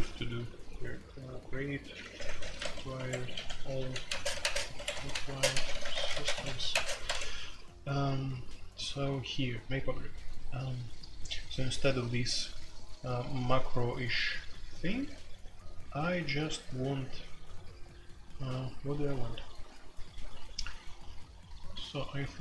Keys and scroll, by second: 1.9-7.3 typing, 2.9 Escape, 10.8-11.3 typing, 13.1 k, 15.3-15.9 k, 16.2 j, 16.4 j, 19.3 k, 19.5 k, 21.3-22.0 typing.